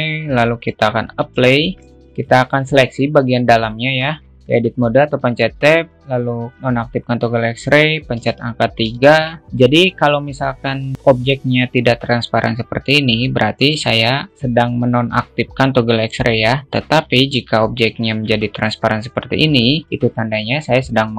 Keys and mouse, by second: 1.0 click, 2.0 alt+z, 2.0-2.6 middle drag, 2.8 alt+middle drag, 3.3-4.3 alt+middle drag, 5.3 Tab, 5.4 alt+middle click, 6.1 alt+z, 6.5 alt+middle click, 7.3 a, 8.0 alt+middle click, 8.6 3, 9.2 shift+a, 9.4 alt+middle click, 10.2 middle click, 10.9 Tab, 11.3 alt+middle click, 18.7 alt+z.